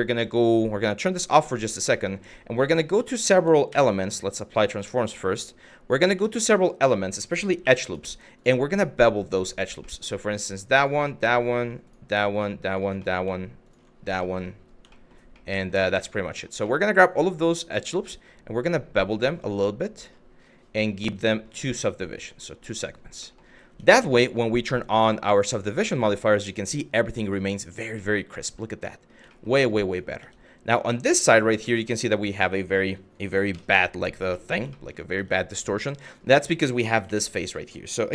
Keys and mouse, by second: 0.6 click, 1.1 shift+middle click, 1.7 middle click, 2.6 Tab, 3.3 ctrl+a, 5.8 Tab, 7.2 2, 9.5 middle click, 10.9 middle click, 11.5 alt+click, 11.9 alt+click, 12.7 middle click, 13.9 shift+middle click, 14.6 shift+middle click, 15.0 middle click, 15.5 shift+middle click, 16.0 middle click, 16.4 shift+middle click, 18.3 click, 22.9 middle click, 23.3 Tab, 23.7 middle drag, 25.0 click, 25.7 middle click, 26.9 click, 27.6 shift+middle drag, 28.6 middle click, 29.0 shift+middle click, 29.5 click, 29.8 Tab, 30.7 Tab, 33.1 KP_Divide, 34.4 shift+middle click, 34.8 Tab, 35.7 click, 36.7 3, 36.9 click.